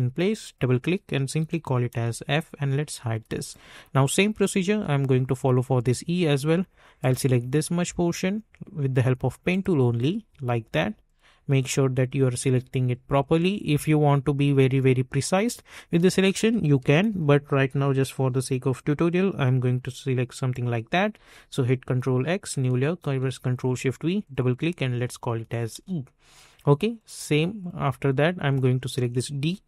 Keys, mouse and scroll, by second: 0.4 click, 1.4 shift+f, 1.9 Return, 2.8 click, 3.2 space, 3.5 click, 3.8 space, 7.0 click, 9.4 click, 17.0 ctrl+Return, 19.5 ctrl+x, 20.5 click, 21.1 ctrl+x, 22.1 click, 22.9 ctrl+shift+v, 24.2 click, 24.8 shift+e, 25.7 Return, 26.9 click, 27.9 space, 28.0 click, 28.4 space.